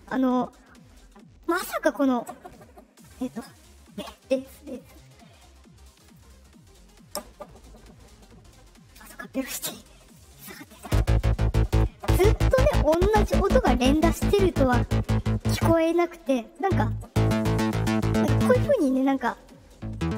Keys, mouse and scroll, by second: 4.7 click, 5.9 click, 10.0 click.